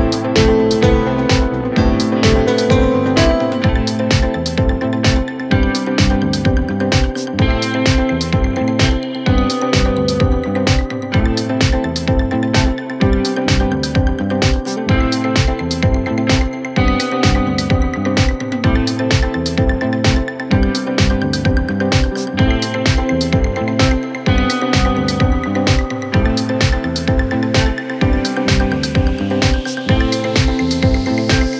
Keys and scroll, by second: 19.3 shift+Page_Down.